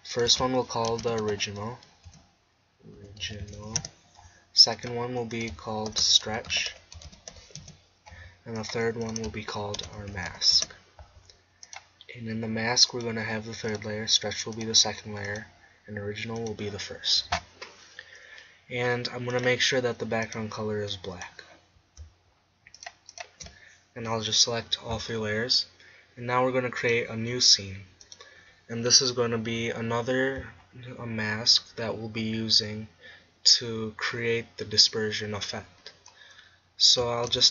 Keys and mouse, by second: 4.8-10.9 drag, 11.7-18.3 drag, 19.4-22.1 drag, 22.8-24.9 drag, 26.8-29.5 drag, 29.5-34.3 middle drag, 36.3-37.5 middle drag.